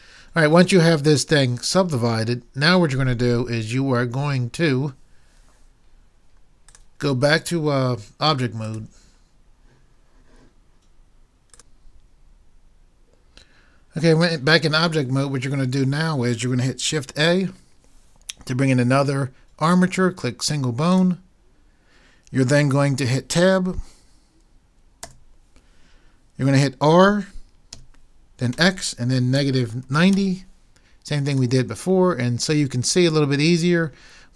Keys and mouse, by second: 17.5 shift+a, 25.0 Tab, 27.8 r, 31.5 click.